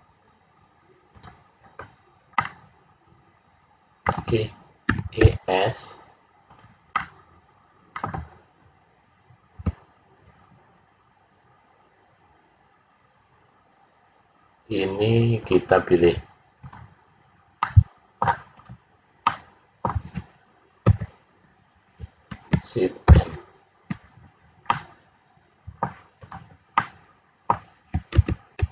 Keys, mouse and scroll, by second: 1.1 click, 2.3 middle click, 4.9 e, 6.9 middle click, 15.3 click, 17.5 middle click, 18.5 click, 19.2 middle click, 20.9 l, 23.0 shift+n, 24.6 middle click, 26.2 click, 26.7 middle click, 28.1 ctrl+z.